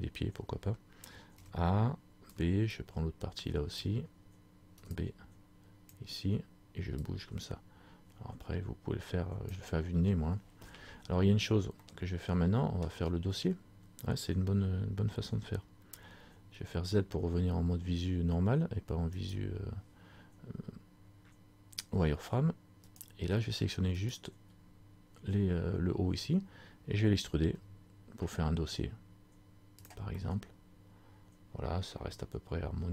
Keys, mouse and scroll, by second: 7.1 click, 11.9 middle click, 13.0-14.4 scroll down 1, 19.3 right click, 23.0 shift+right click, 29.9 click, 30.3 middle click.